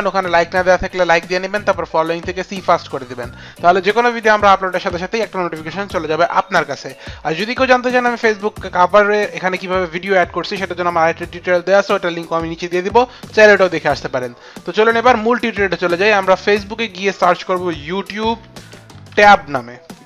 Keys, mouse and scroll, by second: 16.4 click, 17.4-19.4 typing, 18.1 click.